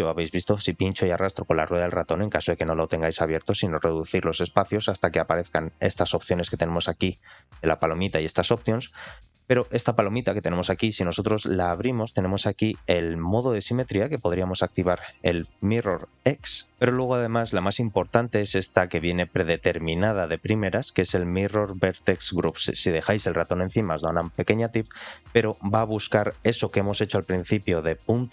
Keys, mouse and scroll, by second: 3.6-5.9 drag, 6.7-7.2 middle drag, 11.2-13.7 drag, 14.9-28.3 drag.